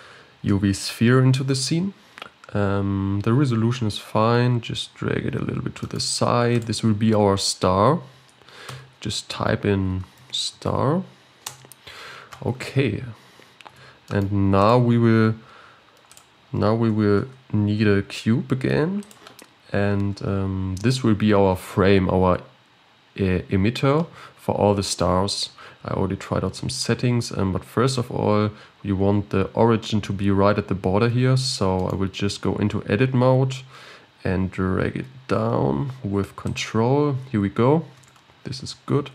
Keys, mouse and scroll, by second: 4.3-5.0 scroll down 10, 5.3 g, 8.7 F2, 13.1-13.6 scroll down 2, 14.0 g, 15.4 scroll up 4, 16.1 click, 16.4-17.1 scroll up 1, 17.1-19.1 scroll up 1, 19.1 shift+a, 20.0-22.4 scroll up 1, 22.4-23.2 scroll up 5, 25.9 scroll up 1, 27.9 Tab, 28.5-31.1 scroll up 2, 31.1 g, 38.0 Tab.